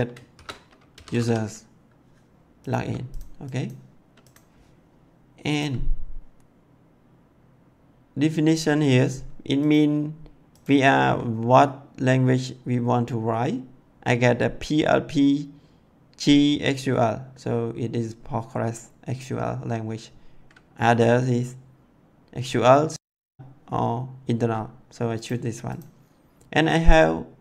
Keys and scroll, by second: 0.0-1.6 typing.